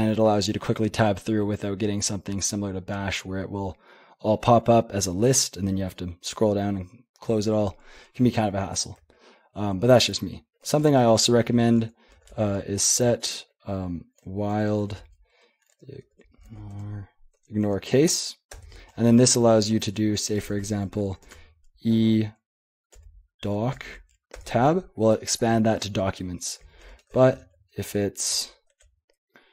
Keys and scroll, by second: 9.0 super+l, 9.8 super+h, 10.7-12.6 typing, 14.0-17.0 typing, 17.4 Tab, 17.7 Tab, 18.5 Return, 20.3-21.3 typing, 23.0-24.3 typing, 24.4 Tab, 26.9 Escape, 27.1-28.4 typing, 27.4 ctrl+p, 28.7 ctrl+n.